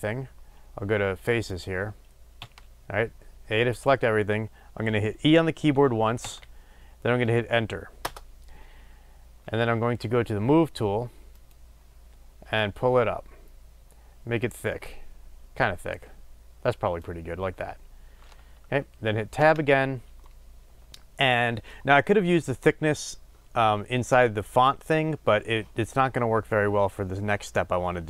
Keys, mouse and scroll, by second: 2.3 a, 6.2 e, 8.1 Return, 11.5 click, 17.0-20.2 drag, 19.3 Tab, 20.2-28.0 middle drag.